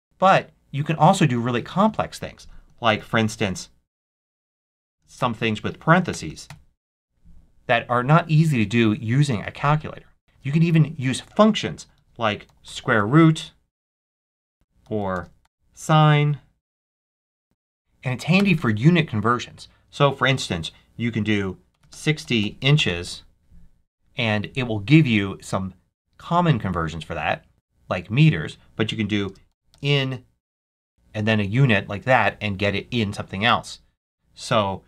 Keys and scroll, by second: 1.8 super+a, 2.6 shift+super+a, 2.8 shift+super+9, 3.2-7.1 typing, 11.2 super+a, 11.5-17.1 typing, 14.5 super+a, 17.4 super+a, 18.3 super+BackSpace, 21.4-23.5 typing, 29.2-31.1 typing, 33.9 super+a.